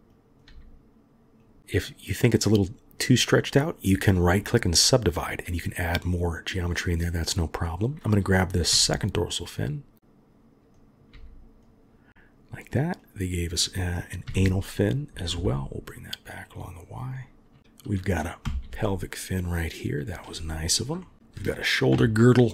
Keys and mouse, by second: 0.1 click, 0.5 g, 3.9 click, 7.2 click, 8.7 g, 10.8 click, 11.1 g, 13.1 click, 15.3 g, 17.6 g, 18.4 g, 21.0 shift+click, 21.9 KP_3.